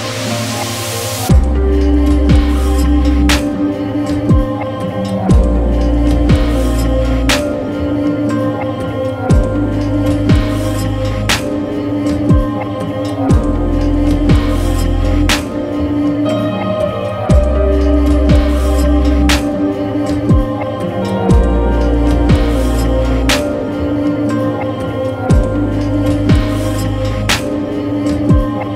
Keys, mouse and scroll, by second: 3.7 Return, 4.4 Tab, 4.9-8.2 right drag, 8.2 Return, 9.4 Tab, 11.7-20.1 right drag, 20.1-23.5 drag, 23.5-26.1 right drag, 26.1 Return, 27.0 shift+f, 28.0-28.7 right drag.